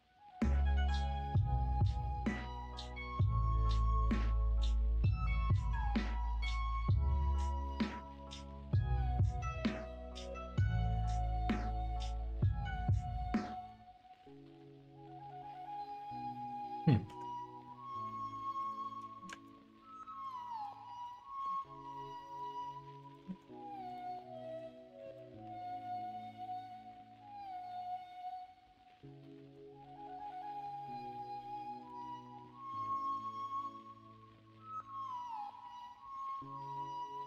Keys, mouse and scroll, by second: 0.0 s, 1.8 middle click, 3.2 click, 3.8 1, 4.0 click, 5.3 g, 6.1 ctrl+z, 8.9 middle click, 9.9 middle click, 10.7 g, 11.4 ctrl+z, 11.9 click, 12.4 click, 12.7 g, 13.4 ctrl+z, 14.0 click, 14.5 h, 15.3 ctrl+right click, 16.1 ctrl+z, 17.0 g, 19.2 shift+Tab, 20.1 click, 20.5 g, 21.3 ctrl+z, 22.3 g, 23.2 ctrl+z, 23.8 click, 24.1 middle click, 24.5 g, 26.1 right click, 26.3 ctrl+z, 29.1 middle click, 30.8 click, 31.7 click, 33.0 click, 33.4 g.